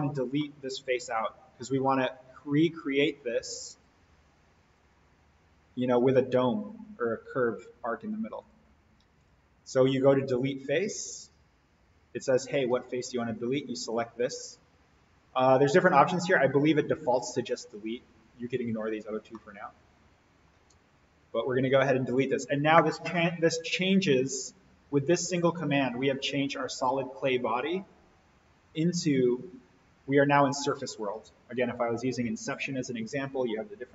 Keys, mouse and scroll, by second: 0.1 click, 0.4-1.7 middle drag, 3.7 click, 4.8 click, 8.4 click, 13.3 click, 14.1-15.9 scroll up 1, 19.3-20.6 middle drag, 21.7 click, 25.0-27.1 drag.